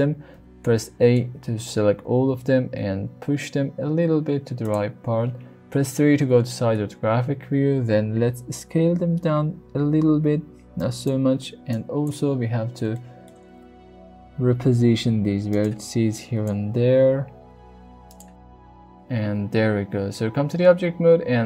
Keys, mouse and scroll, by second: 0.3 a, 0.6 middle click, 2.0 g, 2.2 y, 2.8 x, 4.6 click, 5.8 KP_3, 6.5 shift+middle click, 8.3 s, 10.8 click, 11.7 click, 12.9 shift+middle click, 14.6 g, 15.5 click, 16.1 click, 16.6 g, 17.9 middle click, 18.4 Tab, 18.8-20.5 middle drag.